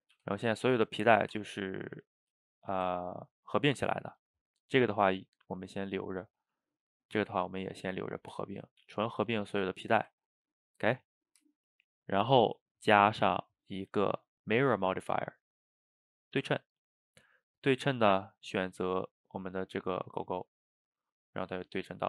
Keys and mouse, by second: 0.0 click, 0.2 g, 2.1 click, 2.5 shift+right click, 3.0-6.0 ctrl+middle drag, 6.0 click, 6.6 click, 7.9 g, 8.6 click, 8.8 g, 9.9-13.2 ctrl+middle drag, 13.2 drag, 13.8-16.8 drag, 18.4 click, 20.3-20.7 middle drag, 20.7 a, 20.8 a, 21.1-22.0 middle drag.